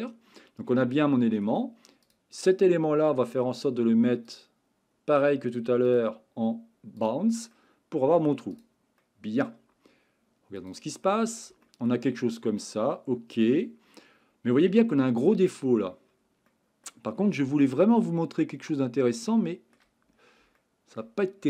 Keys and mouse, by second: 5.9-7.1 drag, 7.5-8.2 middle drag, 9.0-9.4 middle drag, 11.0 middle click, 11.6 shift+middle click, 12.6-14.7 middle drag, 16.5 middle click, 17.8-19.7 shift+middle drag, 20.5-20.9 shift+middle drag.